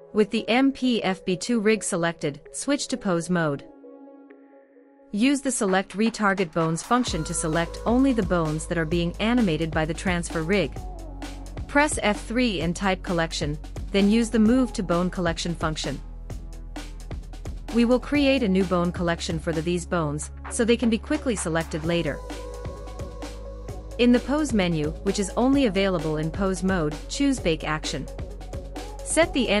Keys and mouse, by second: 2.9-4.5 drag, 7.0 click, 11.6 F3, 14.2 l, 28.8-29.6 drag.